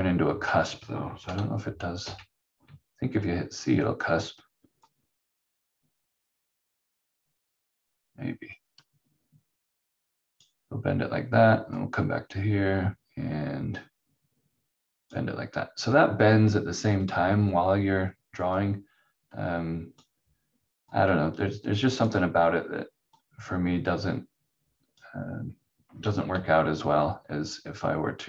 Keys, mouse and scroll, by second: 2.0 c, 4.8 click, 26.3 q, 27.5 click.